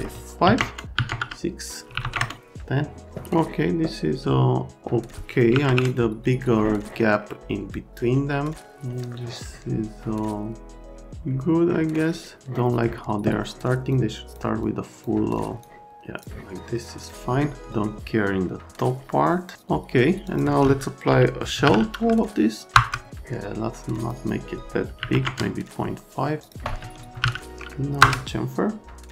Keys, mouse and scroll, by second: 0.5 KP_5, 0.5 KP_Enter, 0.9 KP_6, 1.1 KP_Enter, 1.9 KP_1, 2.0 KP_0, 2.1 KP_Enter, 5.5 KP_1, 5.6 KP_Enter, 9.1 middle click, 13.9 click, 14.6 click, 15.3 click, 15.8 click, 16.5 right click, 20.2 click, 21.3-22.1 typing, 22.7 Return, 24.0 click, 24.1 click, 25.0 KP_Decimal, 25.1 KP_5, 25.2 KP_Enter, 26.9-27.7 typing, 28.0 Return.